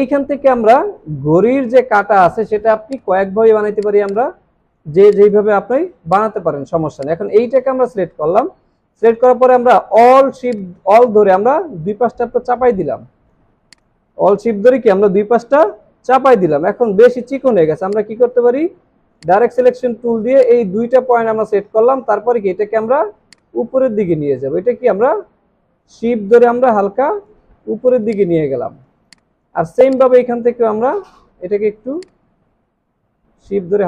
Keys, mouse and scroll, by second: 4.1 double click, 10.5 alt+click, 18.3 alt+scroll up 1, 28.5 alt+scroll down 1, 29.0 space.